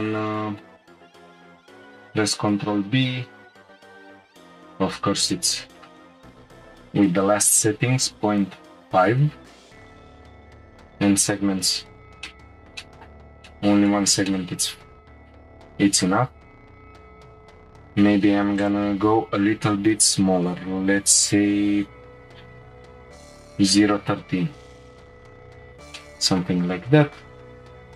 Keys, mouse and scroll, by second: 1.0-2.2 scroll up 1, 2.2 ctrl+b, 5.2-8.3 drag, 10.7-11.9 drag, 11.9 scroll down 1, 12.2-17.3 middle drag, 17.4-20.0 drag, 20.0 BackSpace, 20.5 BackSpace, 25.2 scroll down 2, 25.9 Tab, 26.0-26.8 middle drag, 26.8-27.2 scroll up 2, 27.9 click.